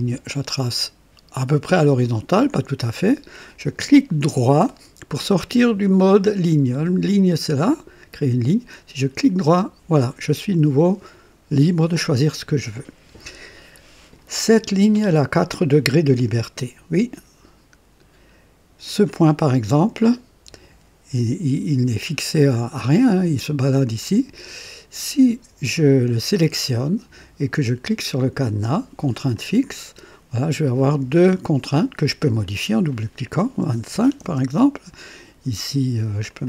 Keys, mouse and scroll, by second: 0.0 click, 1.7 click, 9.1 right click, 18.7 click, 22.7-24.6 drag, 29.2 click, 32.1 click, 33.5 KP_2, 33.8 KP_5, 34.1 KP_Enter, 36.2 click.